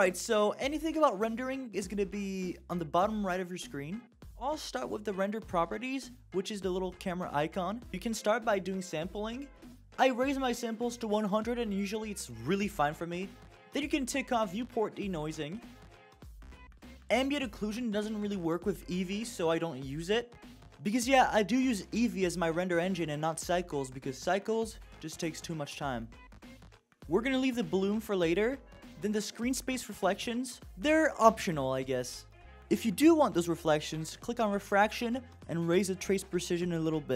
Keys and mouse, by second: 5.8 click, 8.9-13.8 drag, 17.2 click, 17.9 click, 18.3 click, 18.8 click, 19.5 click, 19.9 click, 20.3 click, 20.7 click, 20.9 click, 21.2 click, 29.6 click, 33.7 click, 35.0-36.2 drag.